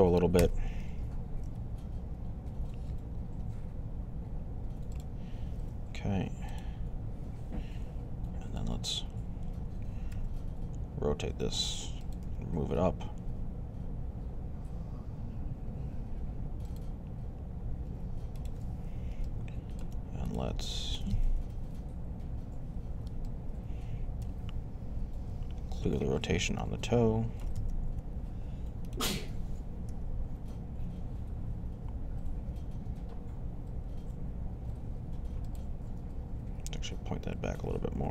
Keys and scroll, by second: 0.2 g, 1.1 z, 9.9 r, 21.2 1, 25.7 alt+r, 27.7 3, 29.7 g, 35.8 r.